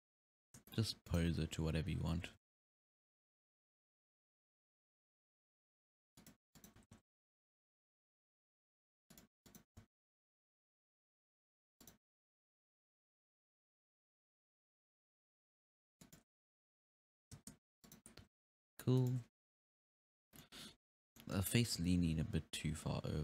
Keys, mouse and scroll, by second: 0.1 scroll up 3, 0.3 scroll down 2, 0.5-1.1 shift+middle drag, 1.1 right drag, 2.3 r, 6.6 right click, 6.8 r, 9.5 right click, 9.8 alt+r, 10.5 r, 12.2 r, 16.4 space, 16.8 alt+r, 17.4 space, 17.9-18.2 right drag, 18.2 r, 20.4-21.7 middle drag, 21.7 r.